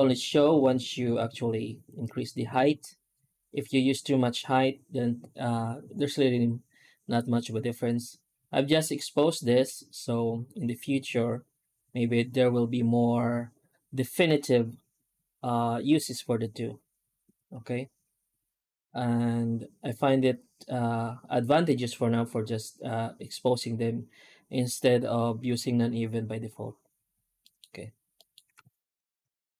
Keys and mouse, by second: 27.3 middle click, 28.0 middle click, 28.3 F9.